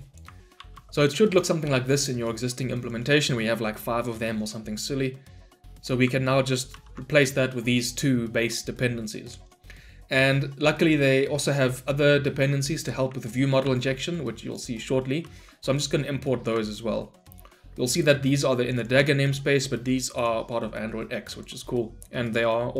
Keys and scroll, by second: 6.8 ctrl+v, 8.4 ctrl+v, 15.2 ctrl+v, 18.5 ctrl+v.